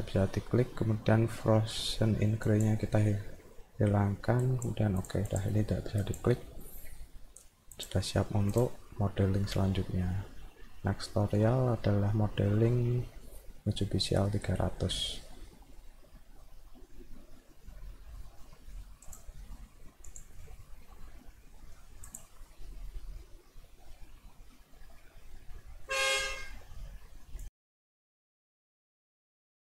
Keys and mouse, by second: 2.4 click, 4.4 click, 5.0 click, 5.3 click, 6.0 click, 7.7 click, 19.1 click, 20.1 click.